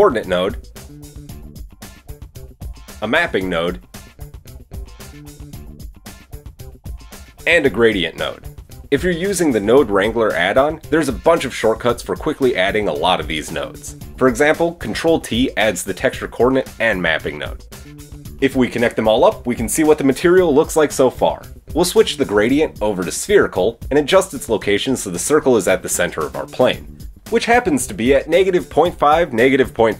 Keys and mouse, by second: 2.5-5.5 shift+middle drag, 2.9 shift+a, 5.5-11.3 drag, 7.4 shift+a, 11.3 middle click, 11.8-29.9 drag.